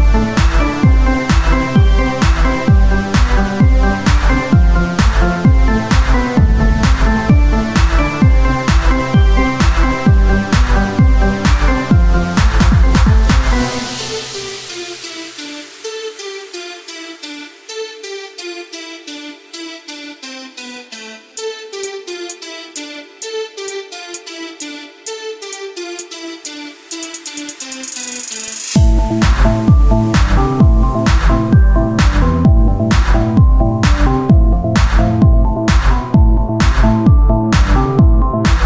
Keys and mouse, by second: 1.1-2.3 drag, 2.3 Tab, 3.3 Tab, 3.3-4.9 drag, 6.7 Tab, 7.7 ctrl+Tab, 9.9-11.2 right drag, 17.4 e, 21.0-22.3 drag, 22.3 ctrl+z, 22.8 o, 23.5-24.6 drag, 28.2 KP_3, 28.6 z, 29.3 c, 30.4-31.6 drag, 31.1 z, 32.5-36.1 drag, 36.1 z, 36.3 c, 37.7 z.